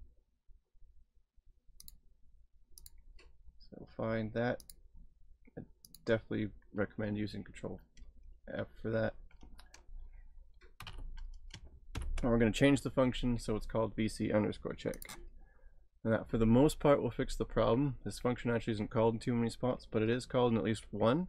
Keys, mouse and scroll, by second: 1.8 click, 4.7 click, 10.5-12.0 typing, 15.0 click.